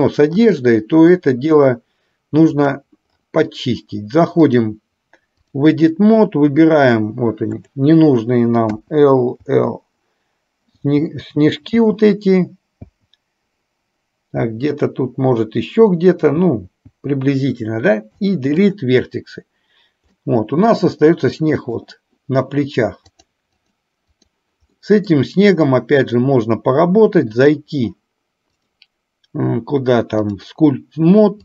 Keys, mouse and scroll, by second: 0.5 click, 2.6 click, 4.5-5.7 drag, 7.6 click, 8.7 l, 9.5 l, 11.8 l, 12.8 l, 16.5 l, 17.0 l, 18.2 Delete, 20.2-21.8 middle drag, 23.1 drag, 23.6-24.3 drag, 24.8-25.2 middle drag, 26.1 click, 27.3 click, 28.6-30.6 drag.